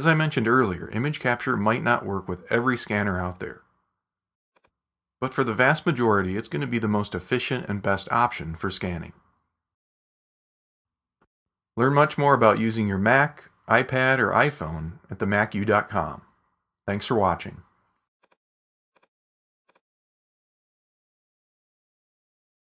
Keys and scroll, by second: 17.1 super+h.